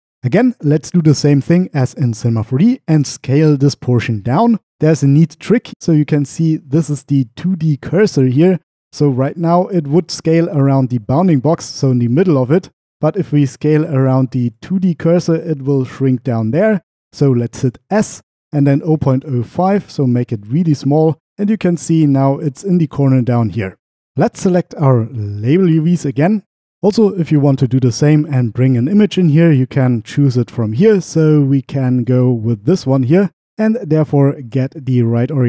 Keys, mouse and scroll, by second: 9.2-11.7 drag, 13.0-14.6 drag, 18.0-19.5 typing, 20.8 Return, 25.1-26.2 drag, 29.8-32.3 drag, 34.0-34.6 drag, 35.2 middle click.